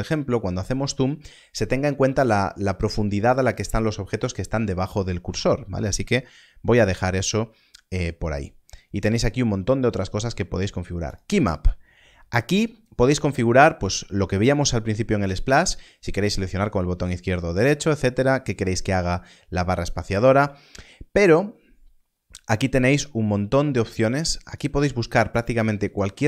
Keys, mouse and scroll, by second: 11.0 click, 21.0 click, 22.0-22.5 scroll up 1, 22.5-24.4 scroll down 1, 24.4 click, 25.7 scroll up 1.